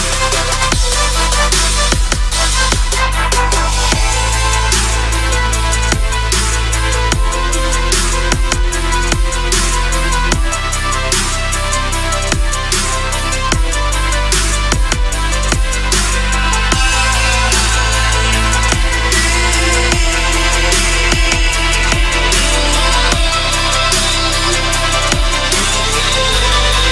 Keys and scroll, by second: 0.0 space, 2.5 space, 6.0 space, 7.8 space, 8.7 [, 11.7 space, 12.8 ], 14.4 space, 16.8 ], 17.1 space, 22.2 ], 22.9 space, 24.4 ctrl+-, 25.6 ctrl+=, 26.0 space.